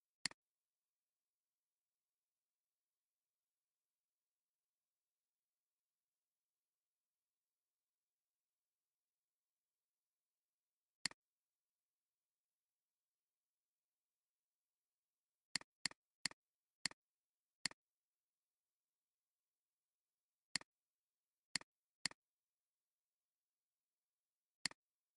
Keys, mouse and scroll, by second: 0.3 alt+click, 11.0 alt+click, 15.8 click, 15.9 double click, 20.6 click, 21.5 click.